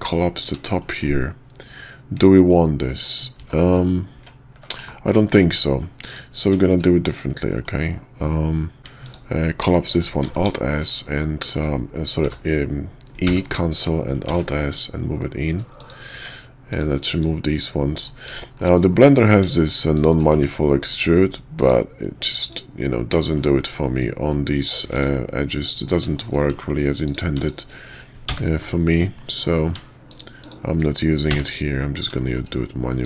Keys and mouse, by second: 0.6 shift+middle click, 1.0-2.5 middle drag, 2.8 middle click, 3.4 ctrl+z, 3.7 ctrl+z, 4.0 ctrl+z, 4.7 /, 5.7 Tab, 6.6 shift+click, 7.5 middle click, 8.8 ctrl+z, 8.8 Tab, 8.9 click, 10.3 alt+s, 12.1 q, 13.2 e, 14.2 alt+s, 16.1 Tab, 17.0 click, 17.7 middle click, 18.3 shift+middle click, 18.9 middle click, 20.3 x, 22.3 click, 23.2 shift+middle click, 23.7 middle click, 24.8 x, 26.1 shift+middle click, 26.5 Tab, 26.9 click, 28.1 f, 29.2 middle click, 30.4 shift+click, 31.8 middle click, 32.2 shift+click, 32.9 click.